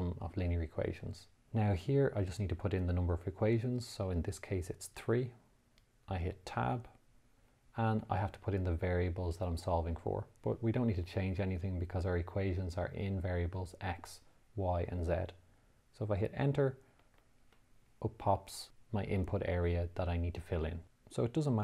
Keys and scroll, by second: 1.0 2, 5.7 3, 7.2 Tab, 17.5 Return, 21.1 x.